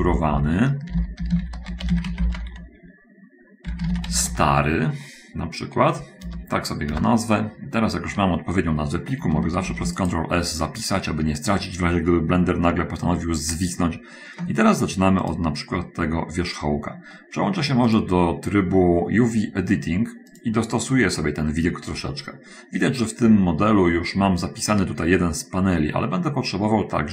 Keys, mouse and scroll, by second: 0.9-4.7 typing, 6.7 Return, 10.1 ctrl+s, 10.1 ctrl+click, 15.7 middle click, 18.3 click.